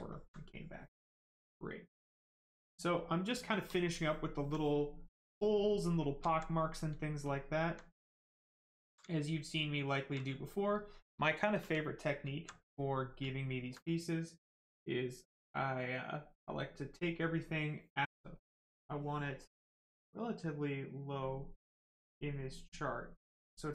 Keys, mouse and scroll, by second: 0.1 alt+right click, 1.1 click, 4.1 alt+right click, 5.5 right click, 6.3 alt+right click, 6.9 alt+right click, 7.2 alt+click, 7.7 alt+right click, 8.5 alt+right click, 8.7 alt+right click, 10.3 right click, 13.3 alt+click, 14.3 click, 14.4 click, 18.3 click, 21.6 click.